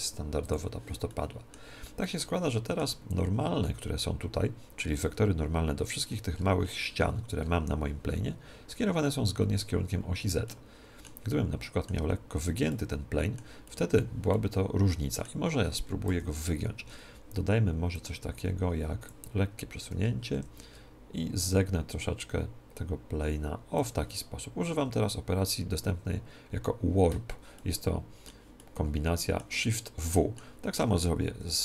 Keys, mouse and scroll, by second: 1.0-5.5 middle drag, 3.1 Tab, 6.0-12.0 middle drag, 9.3-10.4 scroll down 1, 11.3-12.0 scroll up 1, 12.0 Tab, 12.0-12.9 scroll up 1, 12.3 Tab, 12.9-16.0 middle drag, 16.0 KP_1, 17.9-19.7 drag, 20.3 shift+w, 23.8-25.8 drag, 27.5-31.6 middle drag, 31.2 KP_1.